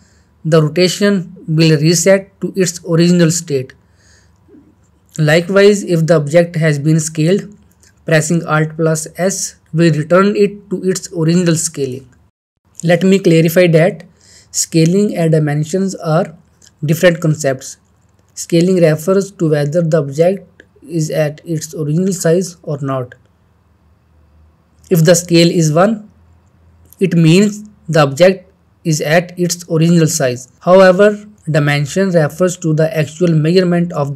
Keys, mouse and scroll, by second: 6.4 alt+r, 6.8 s, 8.4 click, 8.9 scroll down 1, 9.1-9.8 middle drag, 10.7 alt+s, 13.6-16.3 middle click, 14.6-15.7 shift+middle drag, 16.6 scroll up 1, 18.6 shift+middle click, 18.6-21.3 shift+middle drag, 21.4-22.1 shift+middle drag.